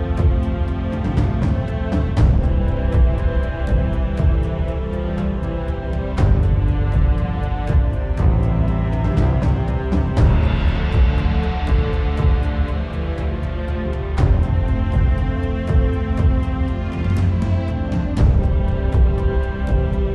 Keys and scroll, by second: 4.2 ctrl+z, 4.8 ctrl+z, 10.7 z.